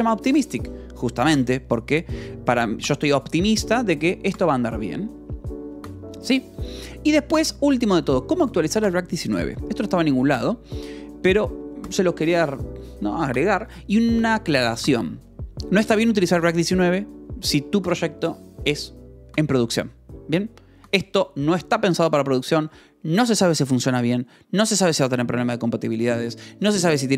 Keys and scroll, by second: 5.8 j, 8.3-11.7 typing, 8.6 Escape, 15.7 Escape.